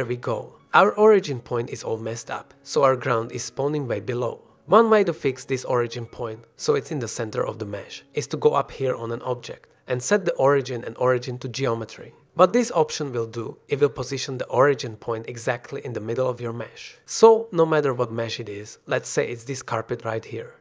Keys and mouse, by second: 1.3-1.6 drag, 1.7 shift+click, 2.4 drag, 4.1-4.4 drag, 6.4 click, 8.0-13.9 drag, 13.9 middle click, 14.3 shift+middle drag, 14.5 middle click, 14.9 shift+middle drag, 15.3 middle drag, 16.0 click, 16.5 click, 19.5-20.6 drag.